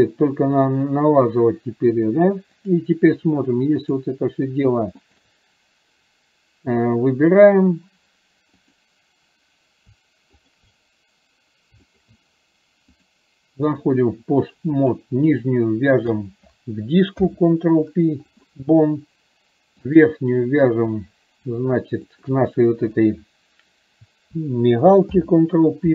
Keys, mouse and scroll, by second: 2.3 click, 3.9 click, 5.2 shift+click, 8.7 click, 11.9 shift+click, 13.2-13.9 drag, 16.2 shift+click, 19.9 click, 22.2 shift+click.